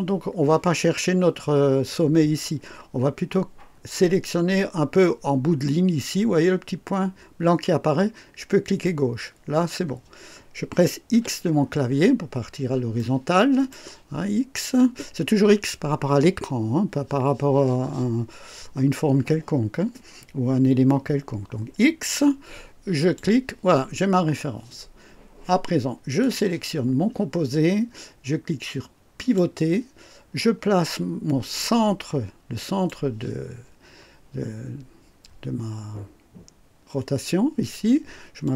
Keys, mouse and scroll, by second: 8.6 click, 11.2 x, 11.5-12.6 scroll down 3, 13.0 right click, 23.0 click, 26.2 click, 29.2 click, 32.6 click, 34.5-34.8 scroll up 1, 38.4 click.